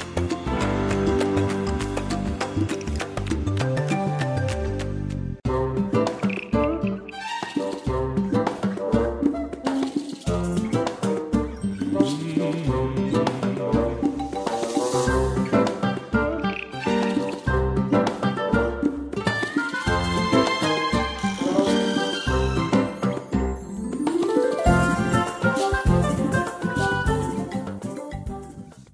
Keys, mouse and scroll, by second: 0.3 shift+click, 2.4 click, 11.6 click, 13.6 8, 14.7 click, 15.9 space.